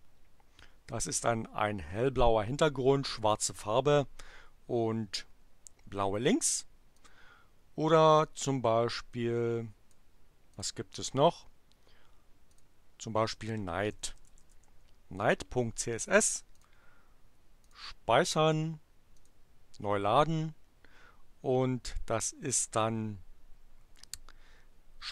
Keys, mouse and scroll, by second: 7.1 click, 9.0-10.1 drag, 10.6 click, 12.5 click, 13.7-15.0 typing, 16.6 click, 17.6-18.6 drag, 19.1 click.